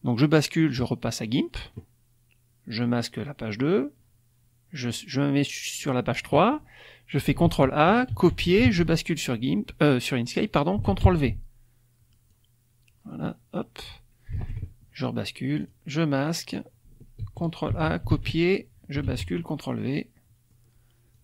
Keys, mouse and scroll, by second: 0.8 click, 2.7 click, 3.5 click, 7.4 ctrl+a, 8.0 ctrl+c, 8.7 ctrl+alt+Tab, 9.3 alt+click, 9.8 middle click, 10.8 ctrl+v, 12.2-14.0 drag, 14.4 alt+Tab, 15.5 click, 16.1 click, 17.2 ctrl+a, 17.7 ctrl+c, 18.1 ctrl+alt+Tab, 19.0 ctrl+v, 19.6-20.7 ctrl+drag, 21.1-21.2 drag.